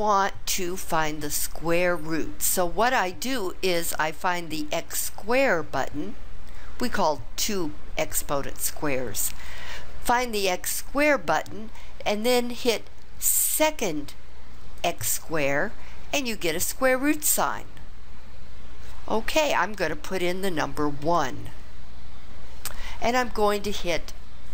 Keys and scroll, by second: 21.0 1.